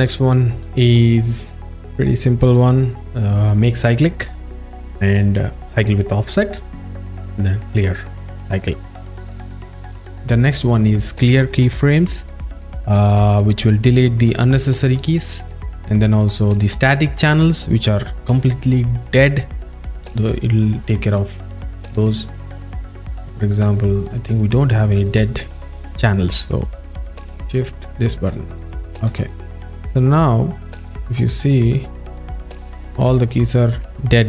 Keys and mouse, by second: 5.7 click, 7.2 click, 15.2 click, 19.4 click, 21.9 click, 23.1 click, 23.5 click, 27.7 shift+click, 29.4 alt+shift+middle click, 31.4 click, 31.7 click, 32.9 ctrl+alt+middle click, 34.1 alt+shift+middle click.